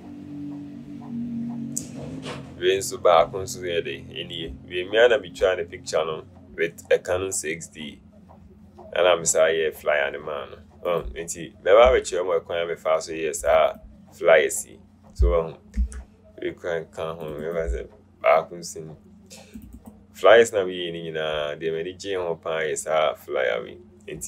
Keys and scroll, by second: 12.2 BackSpace, 16.0 BackSpace.